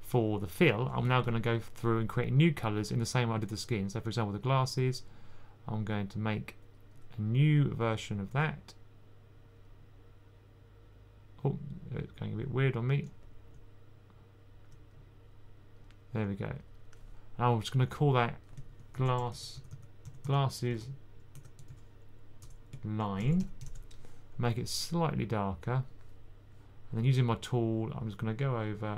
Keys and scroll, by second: 18.6-24.0 typing.